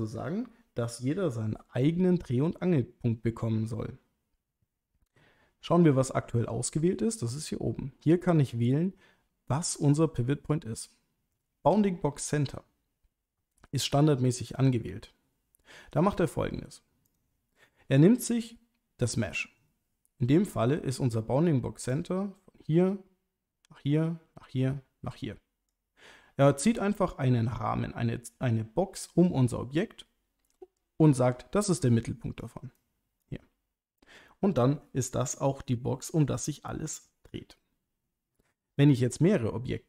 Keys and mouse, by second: 6.5-14.7 drag, 21.9-25.8 drag, 31.7 click, 32.8 click.